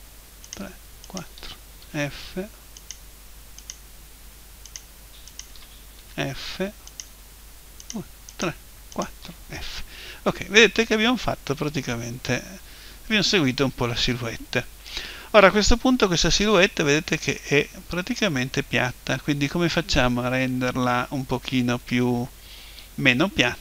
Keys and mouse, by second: 1.8 f, 6.0 f, 9.6 f, 16.6-18.4 middle drag, 21.1-23.0 middle drag.